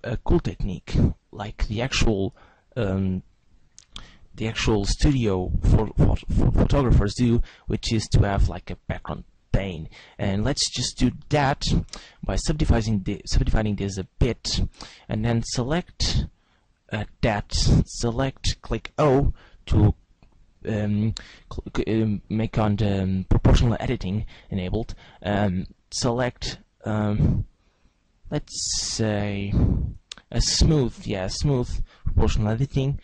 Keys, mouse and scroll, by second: 2.4-4.5 scroll down 1, 4.7 a, 7.2 w, 11.8 w, 14.8 right click, 15.8 right click, 16.9 right click, 19.5 o, 25.9 click.